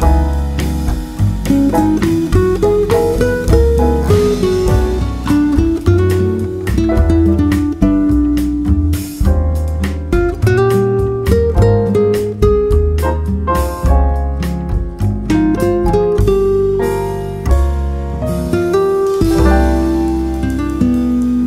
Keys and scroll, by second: 13.1-16.1 typing.